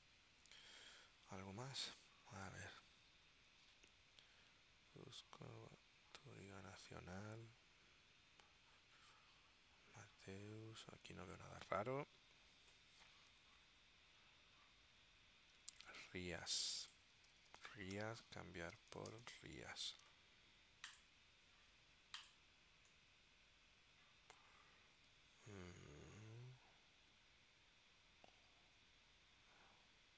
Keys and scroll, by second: 17.1-19.9 typing.